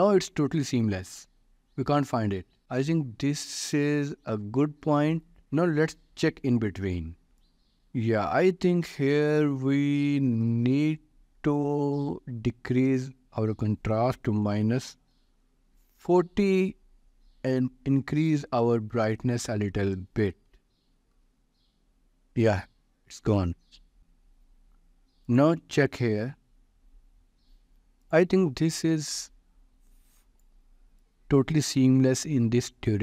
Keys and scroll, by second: 14.6 4, 15.0 0, 15.7 Return, 21.1 Return.